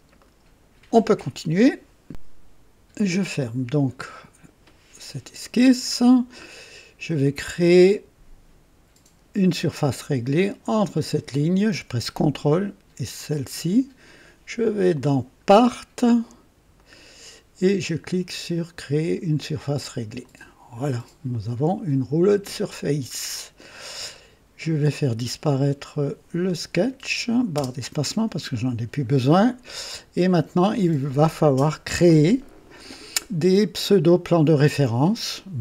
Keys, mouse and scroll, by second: 0.2 right click, 3.3 click, 4.7-5.4 scroll down 2, 5.4 right click, 7.2-8.2 drag, 10.6 click, 13.2 ctrl+click, 14.9 click, 16.9 click, 20.2 click, 25.6 click, 26.7 click, 27.5 space, 27.8 space, 29.1-29.4 scroll down 1, 29.7-30.6 drag.